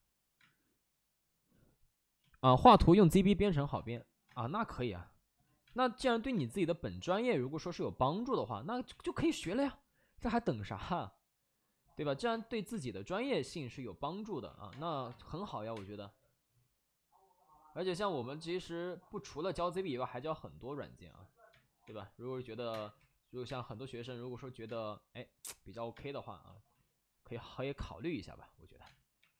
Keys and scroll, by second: 0.3 space, 1.5 space, 2.1 space, 8.8 ctrl+z, 9.1 2, 9.9 5, 12.2 space, 12.7 space, 12.9 1, 14.6 space, 15.0 3, 15.5 5, 15.6 space, 17.8 ctrl+z, 21.4 ctrl+z, 21.6-23.4 typing, 23.9 ctrl+z, 24.6 space, 25.8 space, 27.7 space, 29.1 3.